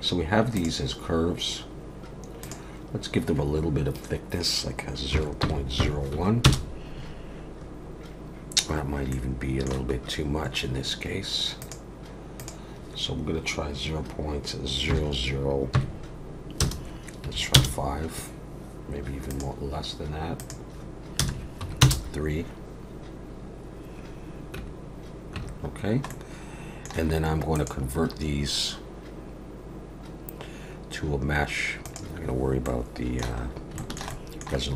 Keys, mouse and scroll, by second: 0.5 click, 2.4 click, 9.1 middle click, 10.0-11.6 scroll up 1, 11.6 click, 19.3 click, 24.6 Tab, 25.4 Tab, 25.8 scroll down 1, 26.1 middle click, 27.5 click, 32.6 middle click, 33.4 scroll up 2, 33.8 shift+middle click, 34.1 middle click.